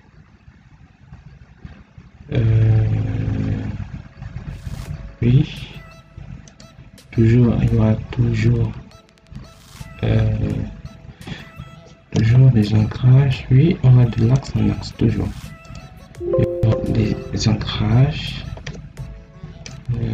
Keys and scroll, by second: 12.3 Escape, 17.6 Escape.